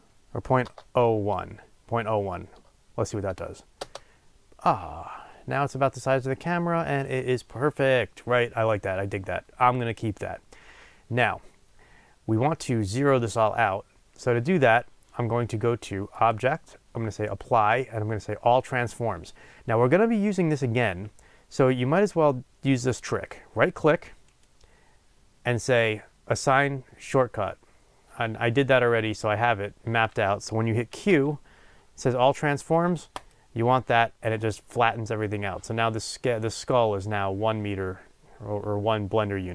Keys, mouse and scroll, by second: 3.7-39.5 drag, 3.9 Return, 5.2 scroll up 1, 10.9 scroll down 1, 33.4 q.